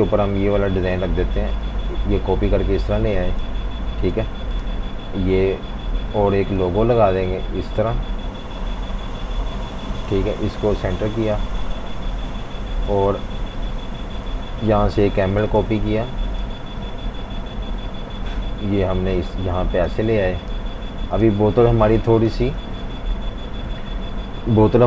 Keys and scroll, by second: 0.8 alt+super+3, 4.1 super+g, 14.9 super+c, 15.9 z, 16.8 super+v, 22.8 F19, 23.8 F18.